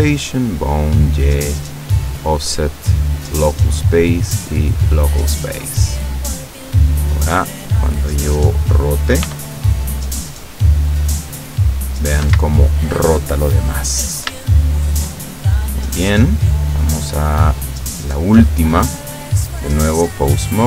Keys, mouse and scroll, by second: 0.0 click, 0.4 click, 0.9 click, 2.1 click, 2.5 click, 3.3 click, 3.8 click, 4.8 click, 7.0 right click, 7.8-8.9 middle drag, 9.3 r, 12.3 Escape, 13.3-14.4 middle drag, 14.5 shift+middle click, 15.4-17.1 shift+middle drag, 17.1 right click, 17.7 right click, 19.1 click, 19.9 click, 20.5 right click.